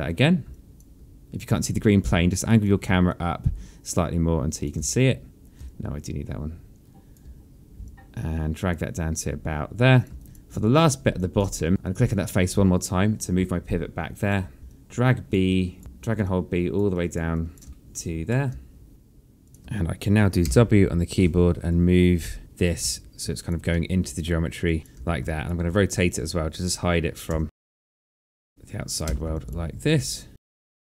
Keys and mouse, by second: 0.0 b, 2.3 alt+click, 3.8 click, 6.3 b, 6.4 click, 7.8 b, 8.6 click, 10.4 alt+click, 12.5 click, 14.4 alt+click, 15.3 b, 15.4 click, 16.9 click, 17.6 click, 17.9 click, 19.0 b, 19.6 alt+middle click, 20.9 w, 22.2 click, 23.4 alt+click, 24.2 alt+middle click, 24.8 click, 25.4 e, 26.0 alt+click, 27.6 w, 27.9 click, 28.3 e, 28.6 click, 29.5 w, 29.8 alt+click.